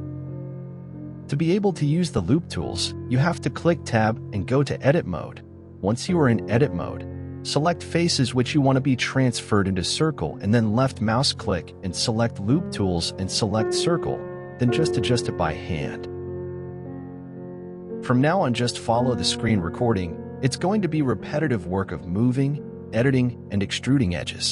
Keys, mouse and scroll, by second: 0.0 s, 4.3 i, 7.5 s, 10.5-11.1 scroll up 1, 11.1 scroll down 1, 11.4-14.4 right drag, 14.4 s, 22.5-23.6 middle drag, 23.6-23.9 scroll up 1, 23.9-24.5 shift+middle drag.